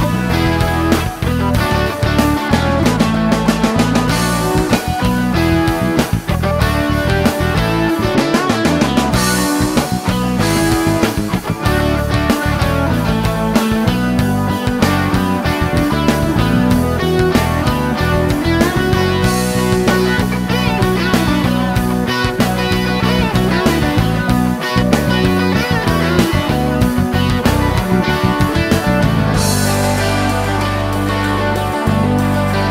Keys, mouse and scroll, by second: 2.7 click, 4.1 middle click, 5.0-7.1 scroll up 1, 7.1-8.8 drag, 9.6 click, 11.8 click, 12.8 space, 13.6-14.6 scroll down 2, 14.7-15.1 scroll down 1, 15.3-15.9 middle drag, 15.9 shift+click, 16.5-16.8 shift+scroll down 1, 18.0 click, 18.5 click, 19.6 ctrl+click, 21.9 click, 24.8 scroll down 1, 25.1 middle click, 26.9 click, 28.0 click, 30.3 ctrl+s.